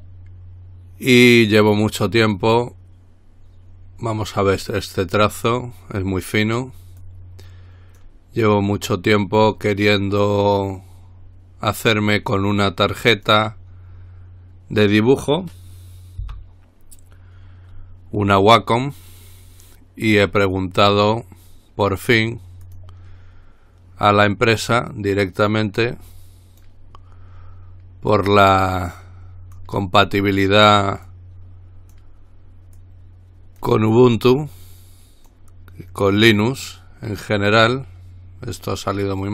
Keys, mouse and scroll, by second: 0.0 click, 4.6-6.0 drag, 7.2-8.7 drag, 13.3 click, 16.5 Delete, 22.9 click, 25.9-27.4 drag, 28.4-30.3 drag, 31.3-32.6 drag, 33.0-34.3 drag, 34.7-36.0 drag.